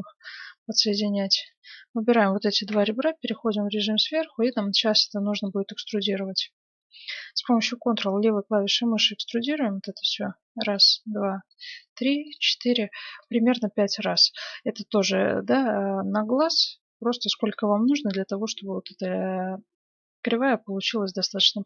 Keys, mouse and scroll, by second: 0.2-2.7 right drag, 2.7 KP_7, 2.9 right click, 3.3 middle click, 4.2-7.2 middle drag, 8.9-15.0 drag, 14.2-16.0 middle drag, 17.0-17.9 scroll up 1, 17.9-19.0 middle drag.